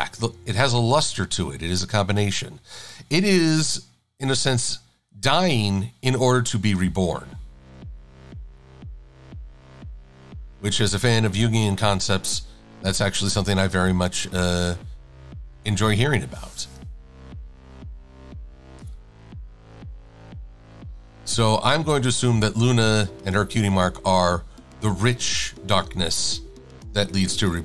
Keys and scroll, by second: 0.7 v, 9.7 a, 13.9 shift+x, 19.1 Left, 19.4 Down, 19.8 Down, 20.4 Down, 23.5 Up.